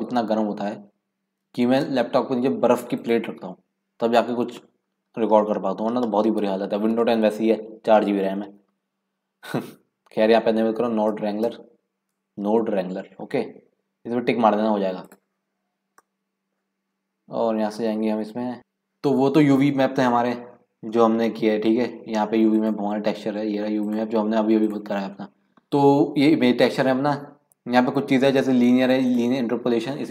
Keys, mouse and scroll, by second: 16.9-18.2 scroll up 7, 18.2-20.7 scroll up 1, 20.7-22.1 scroll up 1, 22.1-23.2 scroll up 1, 23.2-25.7 scroll up 1, 25.7-27.6 scroll up 1, 27.6-28.9 scroll up 1, 28.9-30.1 scroll up 1.